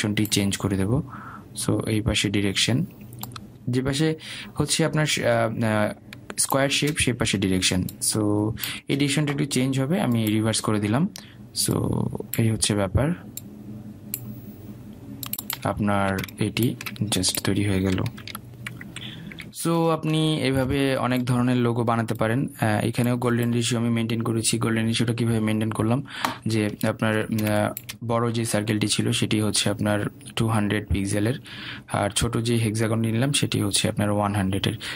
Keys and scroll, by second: 20.8 ctrl+g.